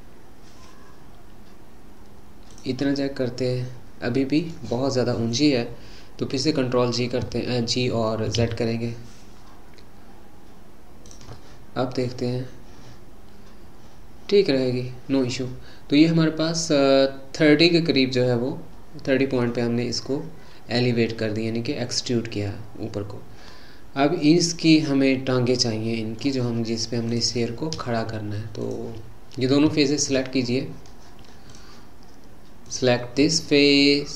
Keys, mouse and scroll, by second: 2.9-6.0 middle drag, 8.3 g, 11.3-14.5 middle drag, 27.1 click, 28.6 shift+click, 30.0 shift+click, 31.5 click, 32.7 click.